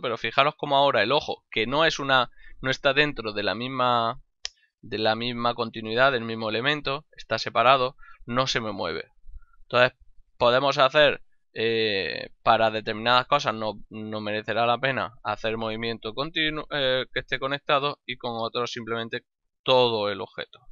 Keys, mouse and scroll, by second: 9.7 right click, 16.5 click, 18.2 click, 19.6 g.